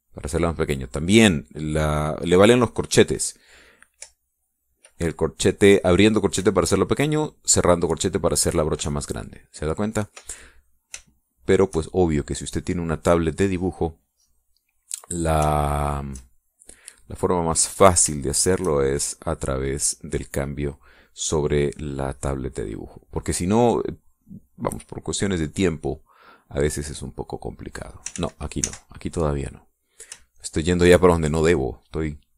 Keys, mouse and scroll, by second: 5.2 [, 7.5 ], 10.0 [, 12.1 shift+click, 16.2 click, 16.6 shift+click, 18.0-19.9 drag, 20.3-24.4 drag, 27.7-29.0 drag, 29.3 ctrl+z, 31.5 shift+click.